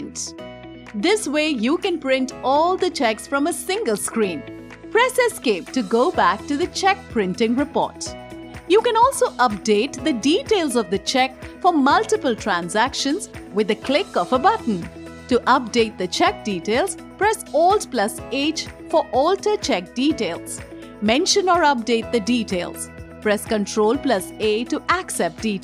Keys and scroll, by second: 4.6 Escape, 17.8 alt+h, 23.9 ctrl+a.